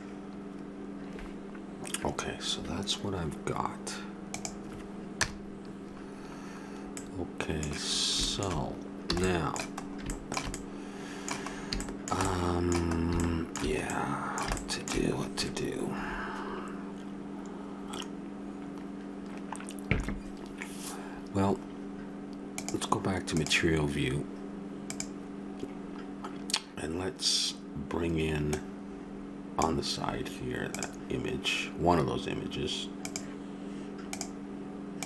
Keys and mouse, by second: 5.2 KP_0, 9.1 a, 19.3-22.5 middle drag, 22.5-23.5 drag.